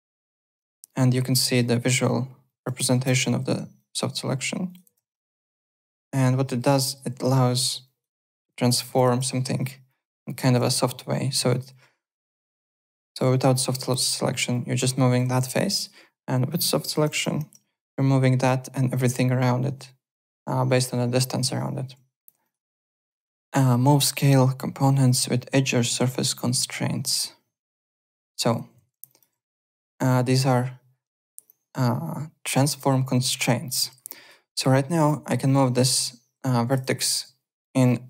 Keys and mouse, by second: 0.1 click, 0.2 KP_2, 0.3 KP_0, 0.5 Return, 0.5 KP_Enter, 2.4 click, 2.6 KP_5, 3.0 KP_Enter, 3.0 Return, 3.7 click, 4.6 click, 4.8 KP_0, 4.9 Return, 5.9 click, 7.1 ctrl+z, 7.8 click, 8.4 KP_1, 8.5 KP_0, 9.0 Return, 9.0 KP_Enter, 9.8 click, 10.6 ctrl+z, 10.8 click, 11.5 click, 13.5 click, 14.5 click, 15.2 ctrl+z, 15.7 click, 16.3 click, 16.7 KP_2, 17.3 Return, 17.3 KP_Enter, 17.9 click, 21.3 ctrl+z, 21.8 alt+Tab, 22.4 alt+click, 27.8 click, 28.0 alt+click, 28.1-29.8 typing, 29.0 alt+click, 30.0 click, 34.1 alt+right click, 34.4 alt+click, 35.0 click, 36.6 ctrl+click, 36.7 ctrl+z, 36.9 alt+click, 37.6 click.